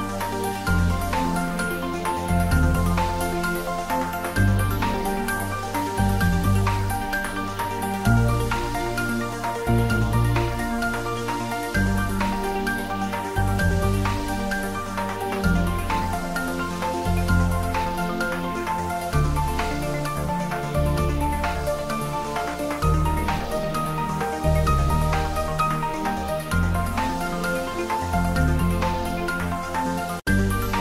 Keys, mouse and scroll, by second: 0.0-0.4 typing, 0.8 click, 2.3-3.2 typing, 3.1 click, 4.3-5.1 typing, 6.0 click, 6.5 ctrl+s, 8.1 click, 8.8 ctrl+middle click, 9.4 shift+middle click, 9.9 ctrl+middle click, 10.3 shift+middle click, 10.8 ctrl+s, 12.8 shift+click, 13.6 ctrl+z, 14.0 shift+click, 14.9 ctrl+z, 15.3 shift+middle click, 16.2 shift+click, 16.8 ctrl+z, 17.5 shift+click, 19.1-20.8 typing, 20.4 click, 20.6 ctrl+z, 22.0 click, 24.1 g, 24.8 click, 25.5 ctrl+s, 26.5 click, 26.8 ctrl+s, 27.0 ctrl+middle click, 28.1 ctrl+s, 28.4 shift+middle click, 29.2 ctrl+z, 29.8-30.7 typing.